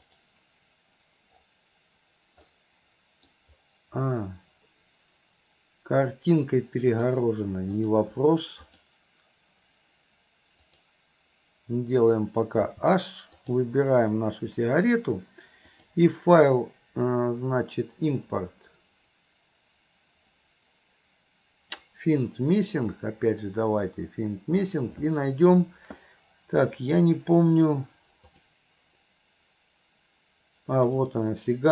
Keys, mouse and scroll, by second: 0.2 click, 2.5-3.4 middle drag, 7.1 click, 8.7 click, 10.7 click, 12.7 h, 13.4 click, 15.8-25.0 drag.